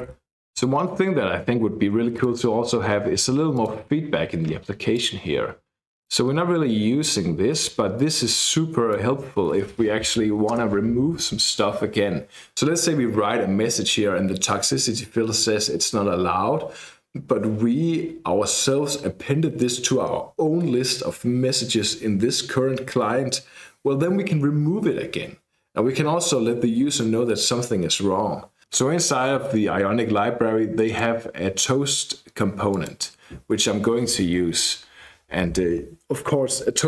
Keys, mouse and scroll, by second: 0.0-0.5 typing, 2.2 click, 3.6 click, 5.0-6.3 drag, 7.6 BackSpace, 8.0-9.5 drag, 10.6 space, 28.6-29.3 scroll up 1, 30.9 click, 32.7 click.